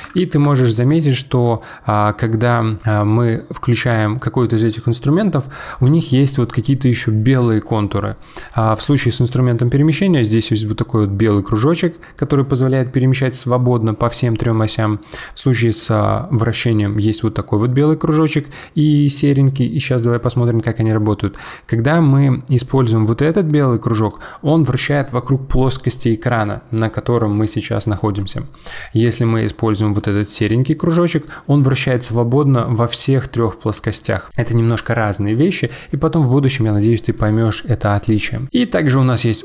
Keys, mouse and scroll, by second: 0.1 ctrl+z, 1.3-3.3 drag, 10.6 click, 15.7-18.7 drag, 22.6 click, 30.0 click, 38.9 click.